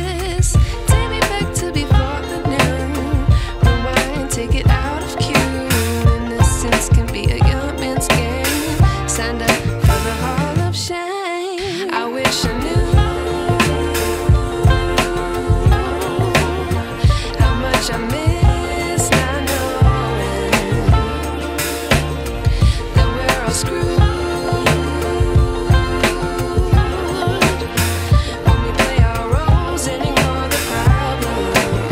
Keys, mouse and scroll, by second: 4.7 alt+scroll down 1, 5.2 alt+scroll down 1, 5.7-7.0 alt+scroll up 2, 7.1 alt+scroll up 1, 7.6 scroll up 1, 7.7 click, 8.7 ctrl+Num_Lock, 9.3 ctrl+j, 11.5 alt+Num_Lock, 11.9 alt+click, 17.8 click.